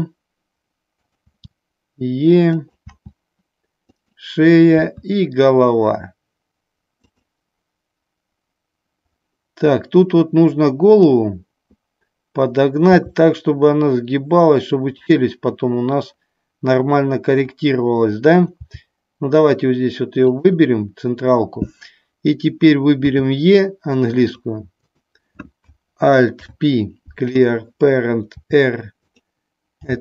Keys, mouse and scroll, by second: 1.0 click, 1.1 e, 2.5 click, 4.0 click, 4.0 e, 7.0 click, 10.9 click, 15.0 click, 24.3 click, 26.4 alt+p, 28.4 r, 29.0 click.